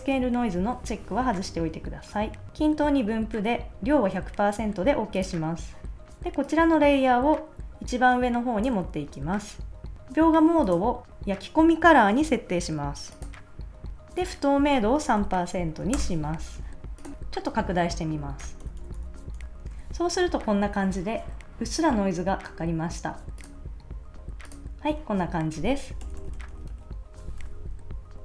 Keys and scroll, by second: 15.2 3, 15.9 Return, 16.6 super+s, 18.4 shift+super+;, 26.0 super+-, 27.4 super+s.